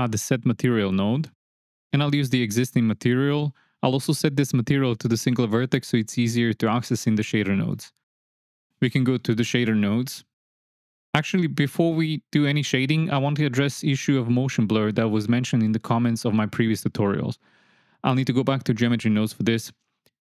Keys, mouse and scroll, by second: 1.8-3.4 drag, 4.7 click, 6.1 click, 6.9 click, 9.1-10.2 drag, 19.0-20.2 drag.